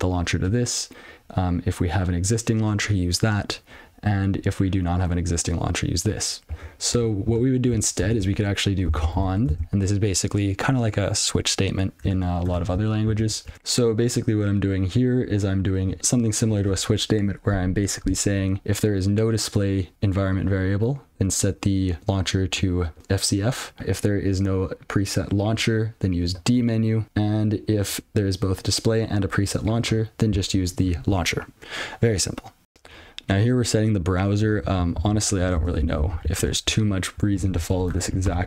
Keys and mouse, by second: 0.9 click, 7.6 click, 8.2-9.7 typing, 13.5 ctrl+d, 33.1 ctrl+n, 34.5 click, 35.5 ctrl+space, 36.5 alt+w, 37.9 Return.